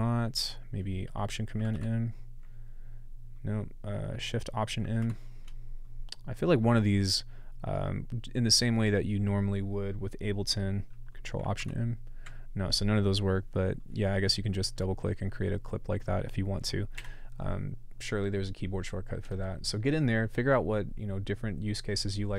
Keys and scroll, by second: 1.7 alt+super+m, 5.0 alt+shift+m, 11.6 ctrl+alt+m, 17.0 BackSpace.